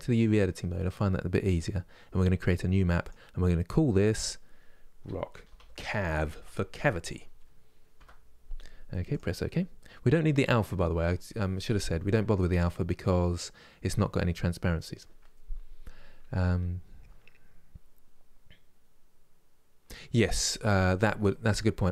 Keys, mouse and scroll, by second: 0.0 click.